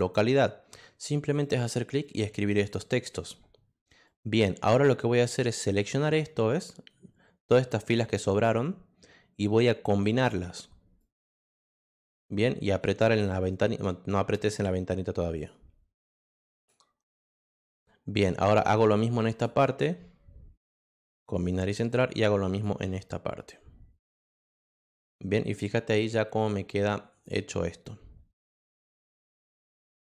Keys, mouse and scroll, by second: 1.4 click, 2.0 click, 2.5 click, 3.1 click, 4.0-7.7 drag, 11.0 click, 14.5 click, 15.3 click, 16.5 click, 17.3 click, 18.6 click, 20.9 click, 21.9 click, 24.1 click, 28.4 click.